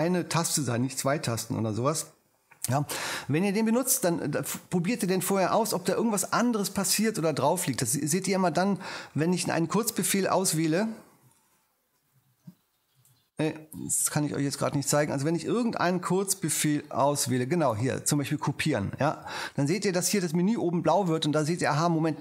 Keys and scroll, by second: 11.1 F4, 16.9 super+c, 18.2 super+c.